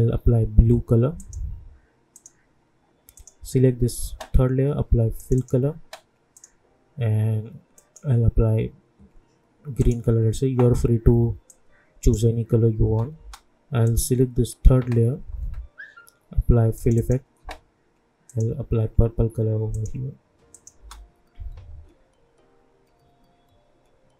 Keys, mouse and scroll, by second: 12.8 space, 13.8 click, 16.7 click, 20.7 space.